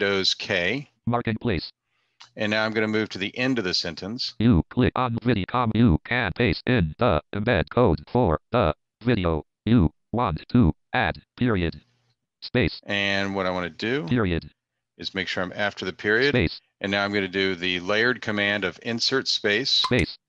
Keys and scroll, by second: 18.1 Insert, 18.1 space.